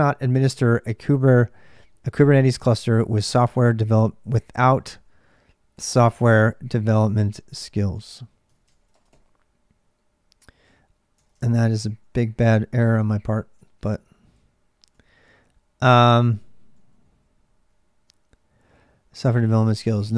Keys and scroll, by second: 0.0-20.1 typing, 11.0 ctrl+[, 11.4 Return, 13.4 ctrl+[.